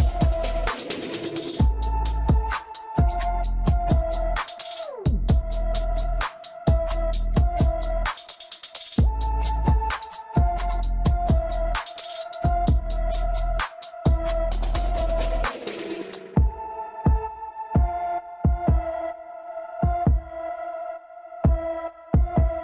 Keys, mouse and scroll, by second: 0.6 middle click, 1.5 g, 2.4-3.5 middle drag, 4.1 scroll down 2, 4.2 middle click, 4.8 click, 5.5-6.1 scroll up 2, 5.8 shift+middle click, 6.1-13.0 middle drag, 13.0 shift+a, 14.4 g, 15.1-16.3 middle drag, 16.3 g, 17.2 middle click, 18.0 KP_3, 18.7 g, 20.1 KP_1, 20.9 g, 22.3-22.6 shift+middle drag.